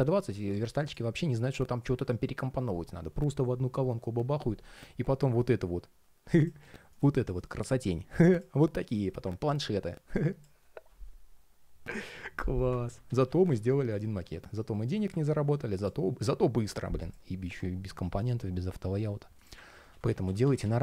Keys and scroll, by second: 0.9 super+d, 12.6 super+z, 19.4 super+z.